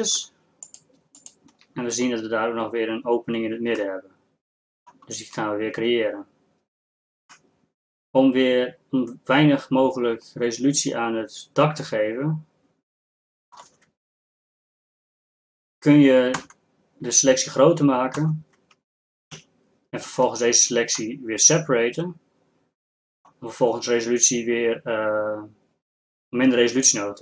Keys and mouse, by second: 4.6 middle click, 7.9 middle click, 9.6 middle click, 11.3 middle click, 12.7 middle click, 16.4 ctrl+KP_Add, 19.4 ctrl+KP_Subtract.